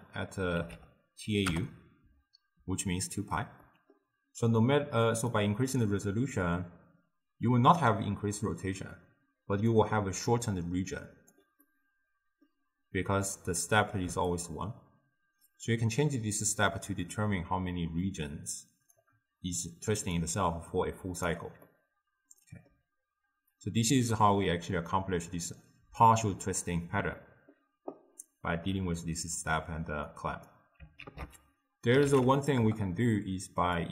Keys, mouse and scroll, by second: 3.7-5.4 middle drag, 5.4-8.4 drag, 10.2 d, 10.4-11.4 drag, 11.4 d, 11.7-14.3 middle drag, 14.3-17.4 shift+drag, 20.1 d, 20.2-21.3 right drag, 21.3 d, 21.7-30.1 middle drag, 30.1-31.1 drag, 31.1 ctrl+a.